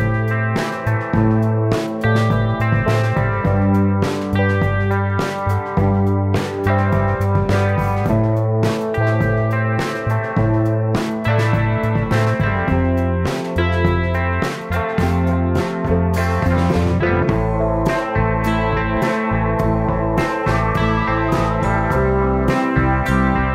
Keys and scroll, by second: 15.6 space, 17.7 super+z.